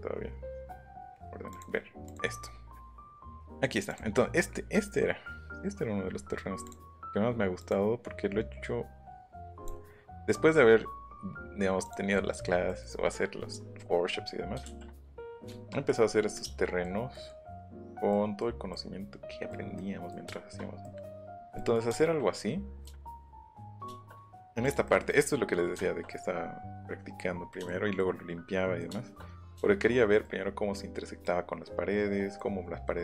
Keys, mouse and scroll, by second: 6.6 click, 7.6 click, 9.6 click, 11.8 click, 12.1 middle click, 12.1 scroll, 13.5-15.1 middle drag, 15.2 middle click, 18.5 scroll up 2, 20.7 middle click, 23.4 middle click, 24.6 click, 24.8 middle click, 25.7 shift+middle click, 27.6 shift+middle click, 28.8 shift+middle click.